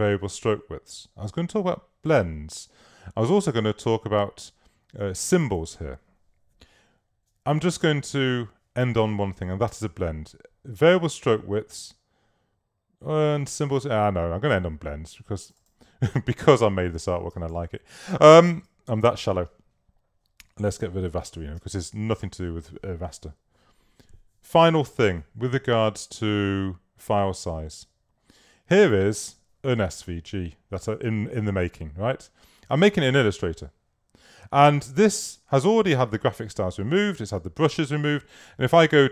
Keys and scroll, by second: 17.4 space, 18.5 super+-, 19.3 super+space, 21.6 space.